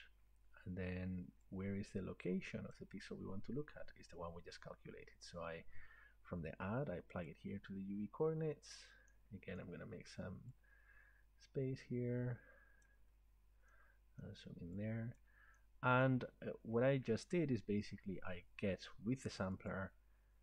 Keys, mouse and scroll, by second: 2.7 click, 7.3 click, 8.4-9.4 scroll, 9.7 scroll, 10.4-11.5 scroll down 3, 12.8 click, 13.1-14.2 scroll, 14.2 scroll down 1, 15.2 click, 16.1-16.4 scroll, 17.9 scroll, 19.8 click.